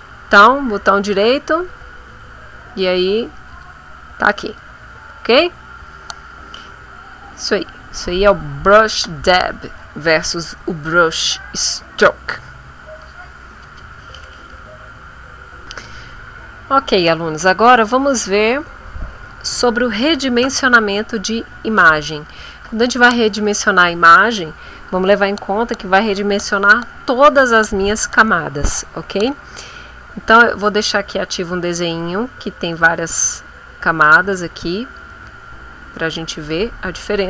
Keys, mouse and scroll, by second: 0.8 right click, 1.5 right click, 3.4 click, 4.4-5.4 drag, 7.4 click, 31.9 click, 32.7 click, 34.2 scroll down 2, 34.6 scroll up 2, 36.6 click.